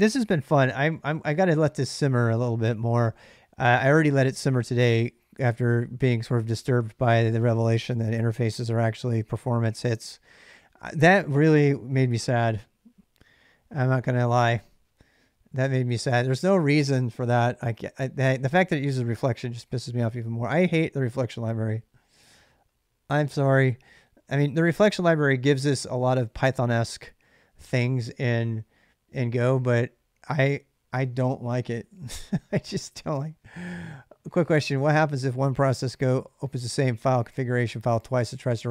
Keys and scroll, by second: 0.1 ctrl+[, 0.2 ctrl+j, 0.4-0.8 k, 2.3-3.2 typing, 4.5 j, 4.8 j.